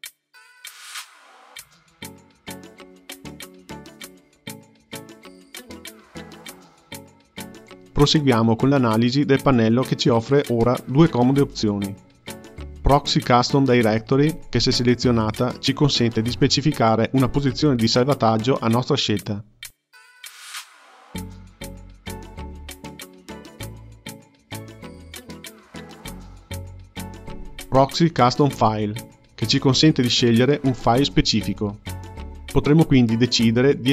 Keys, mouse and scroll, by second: 1.8 space, 9.9 click, 14.6 click, 16.5-19.7 drag, 27.2 click, 28.1 click, 33.7-33.9 drag.